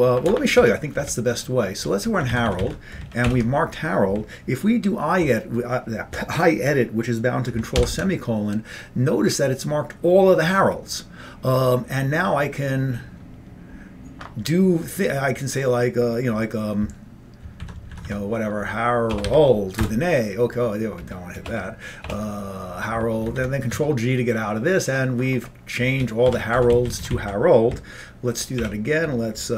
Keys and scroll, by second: 0.7 Up, 2.2 Left, 2.4 Left, 2.5 Left, 2.7 Left, 3.3 ctrl+=, 7.9 ctrl+;, 17.6 Right, 18.1 Right, 19.2 BackSpace, 19.3 a, 20.0 Return, 21.5 BackSpace, 22.1 BackSpace, 23.3 ctrl+g, 23.8 Down, 25.9 Up, 26.3 End, 26.6 Left, 26.8 Left, 26.9 Left, 27.0 Left, 27.2 Left, 28.7 ctrl+=.